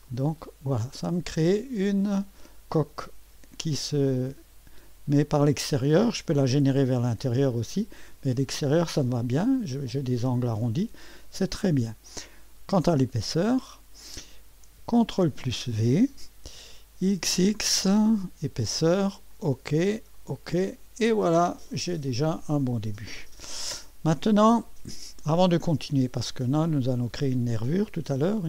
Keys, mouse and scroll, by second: 0.0 click, 0.8-1.6 scroll up 1, 1.6 click, 1.8 right click, 2.4 click, 3.8-4.6 scroll up 2, 4.6 scroll down 2, 6.6 click, 7.6 click, 9.3 click, 9.9 right click, 13.2 click, 15.1 ctrl+v, 17.1 typing, 18.4 click, 19.3 click, 20.1 click, 20.8 middle click, 20.8 typing, 21.9-23.0 drag, 25.9-26.2 scroll up 1, 26.2 typing.